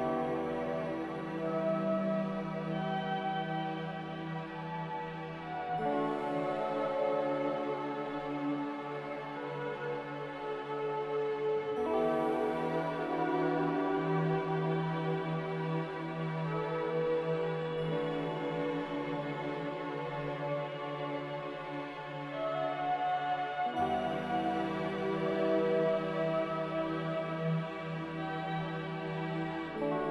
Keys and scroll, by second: 0.3 ctrl+z, 0.8 ctrl+c, 4.1-4.8 typing, 6.9 n, 10.1 ctrl+z, 21.2 a, 23.5 z.